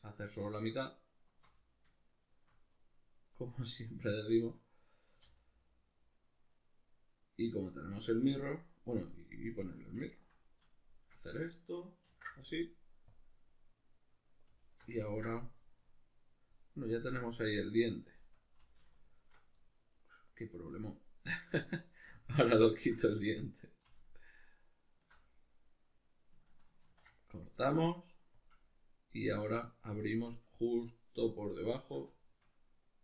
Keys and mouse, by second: 0.4 alt+shift+right click, 1.1 alt+shift+right click, 2.2 shift+right click, 3.6-5.4 middle drag, 5.4 alt+shift+right click, 5.9 alt+shift+right click, 6.6 alt+shift+right click, 7.6 alt+shift+right click, 8.4-9.4 middle drag, 9.4 shift+right click, 10.1-14.6 ctrl+middle drag, 12.1 ctrl+e, 14.6 alt+right click, 15.0-18.9 ctrl+middle drag, 18.9 alt+shift+right click, 19.6-21.9 middle drag, 21.9 alt+right click, 22.2 middle click, 22.6 alt+shift+right click, 22.9-24.1 middle drag, 24.1 alt+shift+right click, 24.9 alt+shift+right click, 25.2-29.6 middle drag, 26.9 ctrl+e, 29.6 right click, 30.0-31.8 middle drag, 31.8 ctrl+right click, 32.2-33.0 shift+middle drag.